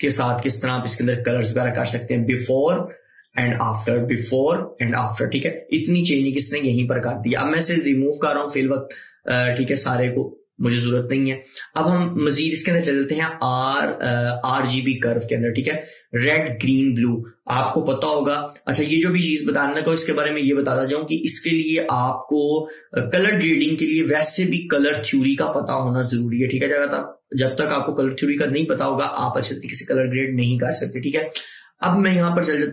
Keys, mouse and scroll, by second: 2.5 click, 2.5 typing, 7.8 click.